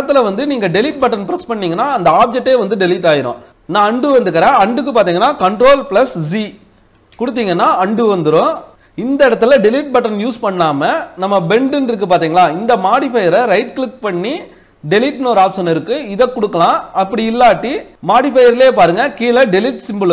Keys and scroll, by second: 5.2 ctrl+z.